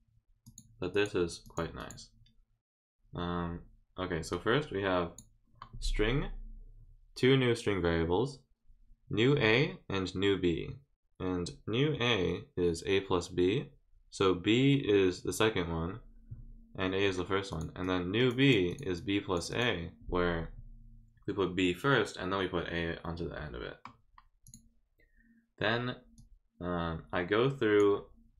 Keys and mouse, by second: 0.4 click, 0.9 click, 1.4 click, 1.8 click, 4.3 click, 17.5 click, 17.8 click, 18.2 right click, 18.7 click, 18.9 click, 19.5 click, 24.4 click, 26.1-27.8 drag.